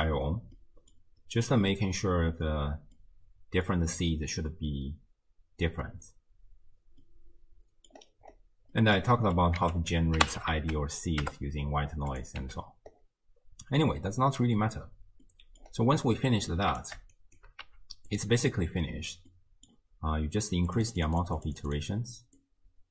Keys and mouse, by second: 0.6 middle drag, 1.7 middle drag, 3.0-3.7 middle drag, 7.1-7.9 middle drag, 8.7 middle drag, 9.6 ctrl+a, 12.5 x, 15.2-15.6 middle drag, 16.5-16.8 drag, 17.2 shift+click, 17.7 g, 19.5 middle click, 20.7 click, 21.2 click, 21.4 click, 21.6 click, 22.4-22.9 drag.